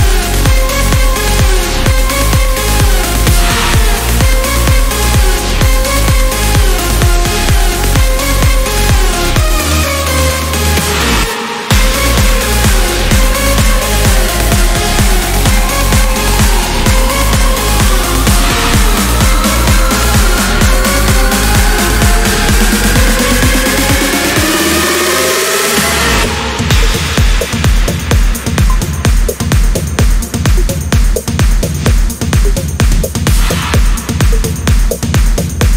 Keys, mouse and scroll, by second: 1.4 click, 4.2 click, 5.0 click, 7.0 click, 8.5 click, 9.1 space, 9.8 click, 12.2 click, 14.0 click, 17.0 click, 18.4 Return, 20.0 click, 20.5 Delete, 21.3 click, 21.9 Delete, 24.8 click, 26.7 click, 29.3 click, 32.6 click, 33.1 click, 33.9 click, 35.3 click.